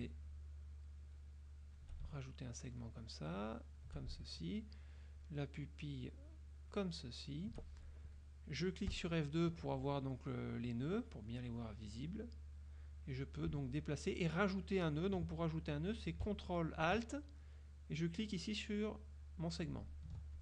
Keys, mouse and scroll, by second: 0.4-2.1 shift+drag, 3.0-4.1 shift+drag, 5.3-7.0 shift+drag, 9.0 F2, 12.2 click, 19.8 ctrl+alt+click.